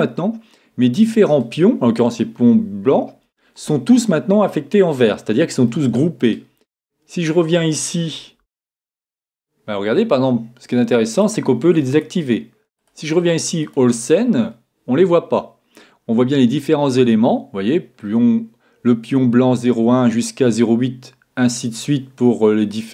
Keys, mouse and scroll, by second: 0.0-2.6 middle drag, 5.7-7.6 middle drag, 8.5 a, 11.1-14.7 drag.